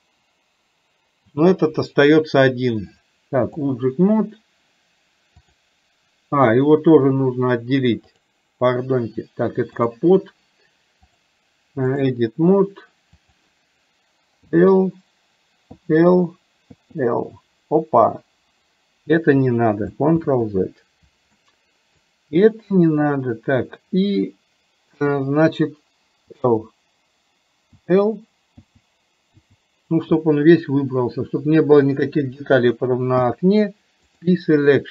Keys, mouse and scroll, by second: 3.1 click, 5.4 click, 8.1 click, 9.8 click, 11.2-12.3 drag, 13.4 click, 20.3 ctrl+z, 21.4 middle click, 30.4-31.9 middle drag, 30.4 l.